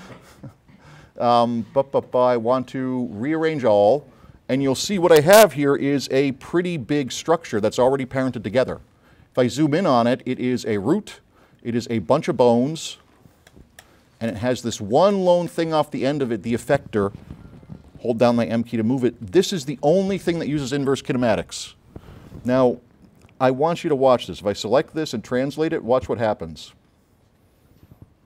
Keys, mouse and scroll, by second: 3.5 click, 4.3 middle click, 6.5 s, 6.6 click, 7.3 scroll up 2, 7.9 s, 8.3 scroll down 2, 8.8-9.3 scroll up 2, 10.3 click, 10.5 click, 11.2 click, 12.2 s, 12.4 click, 12.9 click, 13.3 click, 13.9 click, 14.4 click, 14.9 click, 15.3 click, 15.6 click, 16.4 click, 17.8 m, 18.0 click, 22.9 middle click, 23.3 scroll up 1, 24.3 click, 24.9 scroll up 1, 25.5 click, 26.5-27.6 drag.